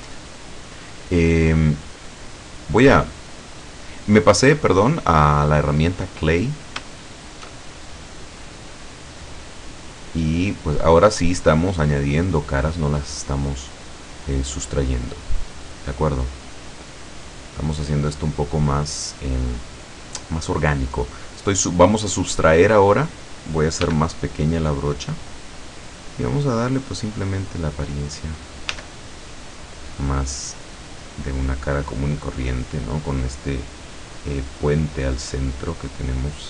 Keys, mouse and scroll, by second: 0.0-1.2 middle drag, 1.6-4.2 middle drag, 6.4-6.9 scroll up 1, 7.1 shift+middle click, 7.8 shift+middle click, 9.5-13.8 drag, 14.1-15.2 drag, 15.3 scroll down 1, 16.0 click, 17.1-18.1 drag, 21.3 click, 23.9 f, 25.1 click, 27.0-28.3 drag, 28.8 f, 29.8 click, 30.7-31.8 drag, 32.1-33.1 drag, 34.2 click, 35.1-36.4 drag.